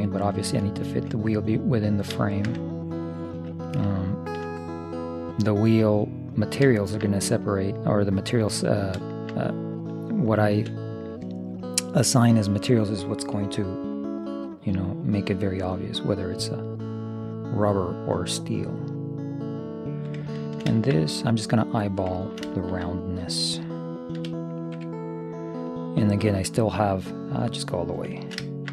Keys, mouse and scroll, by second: 0.1 Escape, 3.2-5.3 middle drag, 6.9-8.8 middle drag, 9.1-11.3 middle drag, 10.5 right click, 12.5-14.1 drag, 13.5 ., 14.3-16.2 drag, 20.4-23.8 middle drag, 24.3 e, 25.7-27.7 drag, 28.3-28.7 middle drag.